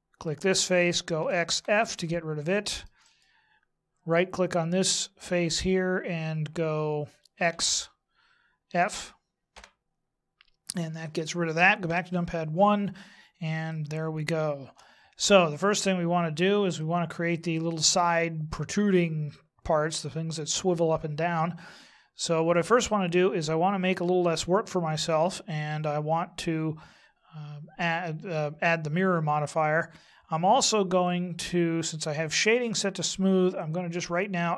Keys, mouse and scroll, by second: 1.1 x, 2.4 middle click, 3.0 right click, 7.5 x, 11.8 KP_1, 13.7 shift+middle click, 16.7 shift+middle click, 33.5 click.